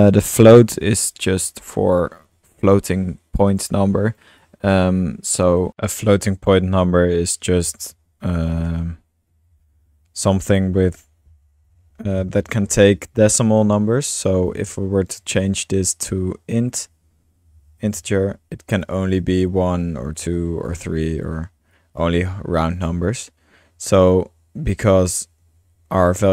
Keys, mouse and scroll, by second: 1.5-4.2 drag, 4.4 click, 5.0-5.4 drag, 5.4-6.2 typing, 6.7-7.5 drag, 7.5 space, 9.1-11.9 typing, 14.5 typing, 14.5-16.9 drag, 17.2-19.6 typing, 18.7 click, 21.5-22.2 typing, 21.7-22.8 drag, 23.5 BackSpace, 24.1-25.2 drag, 25.8 middle click, 26.1 click.